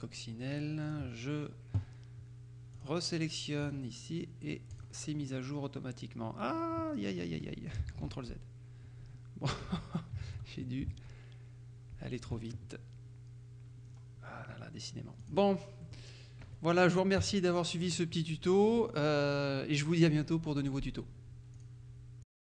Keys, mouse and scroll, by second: 0.9 click, 2.8 click, 3.7 click, 4.8 click, 8.0 ctrl+z, 11.0 Tab, 12.1 Tab, 13.9-14.3 scroll down 2, 14.3-14.9 scroll up 2, 15.3 click, 15.9 middle click, 16.5 KP_Subtract, 17.3 KP_Subtract, 18.3 middle click, 21.7 click, 22.3 click.